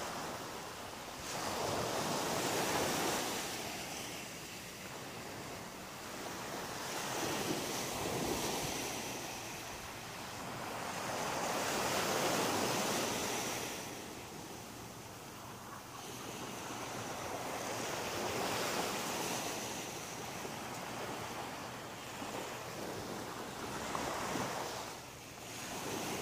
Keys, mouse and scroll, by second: 0.3 click, 0.6 middle click, 3.4 middle click, 4.1 shift+middle click, 7.3 click, 8.2 right click, 8.7 middle click, 10.0 right click, 10.7 shift+right click, 12.2 m, 14.6 right click, 17.6 m, 19.1 right click, 19.7 shift+right click, 20.6 m, 22.1 right click, 22.7 shift+right click, 23.6 m, 24.8 scroll up 2, 25.3 middle click, 26.1 shift+middle click.